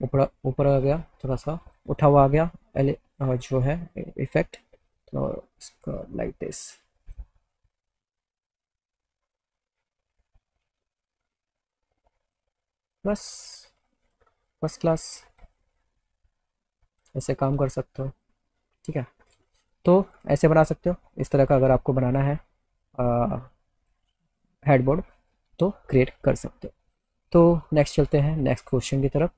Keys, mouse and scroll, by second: 1.3 click, 2.9 click, 4.3-7.2 drag, 7.9 click, 9.1-12.4 drag, 13.2 click, 14.1 click, 15.0 alt+middle click, 16.1 click, 16.7 alt+middle click, 20.1 click, 20.2 z, 20.9 click, 21.2 alt+click, 22.0 click, 22.5 alt+click, 28.2 click.